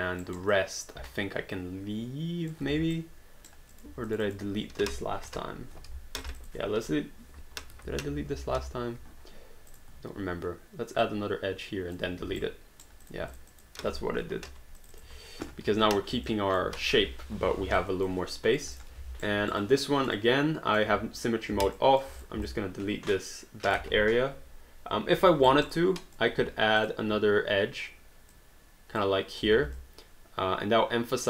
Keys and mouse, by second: 0.2 alt+right click, 0.5 alt+click, 2.8 q, 2.9 right click, 3.7 click, 4.1 shift+click, 6.2 click, 6.8 Delete, 7.8 ctrl+z, 9.7 click, 11.0 click, 12.2 q, 12.4 right click, 13.0 click, 14.4 Delete, 14.8 click, 15.1 Delete, 16.3 alt+click, 17.8 alt+click, 18.8 click, 19.2 alt+right click, 19.6 alt+click, 21.7 alt+click, 22.2 click, 22.5 alt+click, 25.5 alt+right click, 25.8 alt+click, 26.8 click, 28.3 click, 29.6 alt+d, 29.8 alt+click.